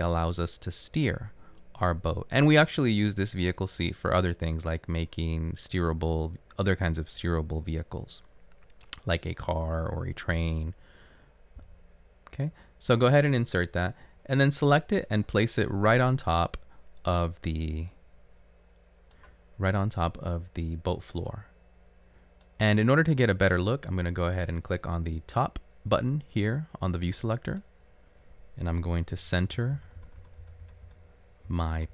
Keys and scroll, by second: 29.2-31.5 typing.